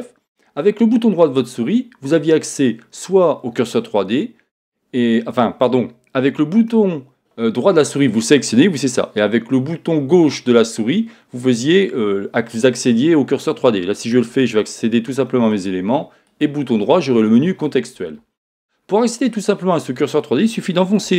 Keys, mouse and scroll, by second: 13.9 click, 14.1 middle click, 14.6 click, 15.5 click, 16.2 right click, 19.8-21.1 right drag.